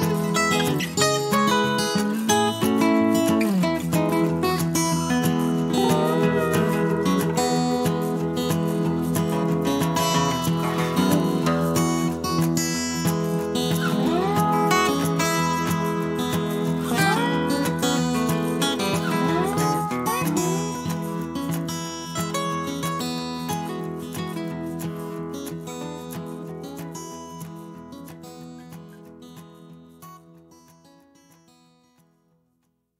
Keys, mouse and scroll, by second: 2.1 shift+click, 3.2 shift+click, 4.2 shift+right click, 5.7 click, 7.2-9.1 drag, 9.9 -, 10.7 click, 11.0 middle click, 11.6-13.2 drag, 13.3 -, 13.7 middle click, 14.7-18.7 drag, 18.7 middle click, 22.7 click, 27.3 click, 30.7 click.